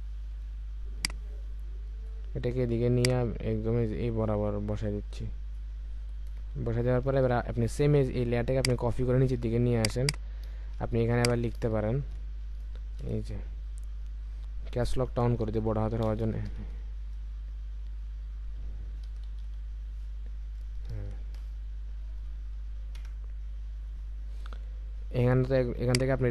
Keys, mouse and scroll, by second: 6.3 Return, 8.5 alt+click, 9.9 double click, 10.6 ctrl+a, 11.9 ctrl+a, 16.0-16.5 typing, 19.0 typing, 20.7 typing, 23.7 typing.